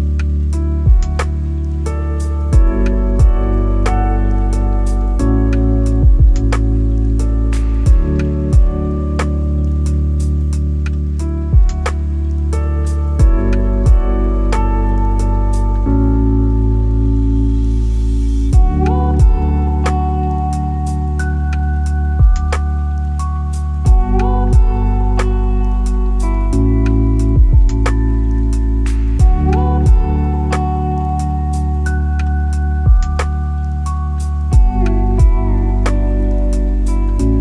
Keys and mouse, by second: 0.9 click, 1.9 click, 2.8 click, 3.8 click, 4.5 click, 5.0 click, 8.0 click, 9.5-11.2 drag, 12.0 middle click, 12.7 middle click, 13.4 middle click, 15.5-19.3 drag, 20.3 middle click, 23.0 click, 24.6 click, 25.1 click, 26.0 click, 26.4 click, 26.7 click, 28.1 middle click, 29.1 click, 29.3 click, 29.7 click, 29.9 click, 30.6 middle click, 32.2 click, 34.4-34.8 drag, 35.8-36.1 shift+middle drag, 36.8-37.4 drag.